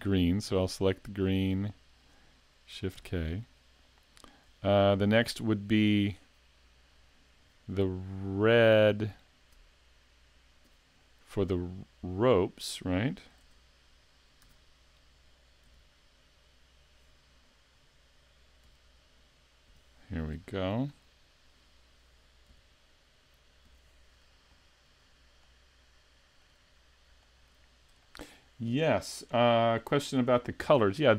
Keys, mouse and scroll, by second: 1.3 click, 2.9 shift+k, 4.1 scroll up 2, 4.7 shift+middle click, 13.4 Tab, 14.4 a, 15.6 l, 16.4 scroll up 2, 18.6 l, 19.7 l, 20.0-20.3 scroll down 2, 20.4 shift+middle click, 21.0 scroll up 1, 22.5 l, 23.7 l, 25.4 shift+middle click, 27.2 shift+middle click, 27.6-28.1 scroll up 2, 28.0 shift+middle click.